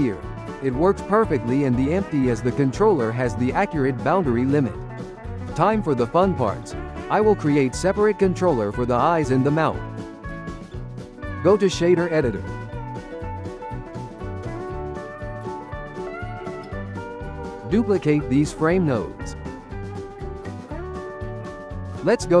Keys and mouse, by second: 0.0 g, 2.3 ctrl+middle click, 3.2 g, 10.1 g, 11.2-13.6 drag, 13.8 click, 14.3-15.4 middle drag, 15.6 click, 17.0-18.0 shift+middle drag, 18.0 shift+d, 20.2 click, 20.9-22.4 ctrl+middle drag.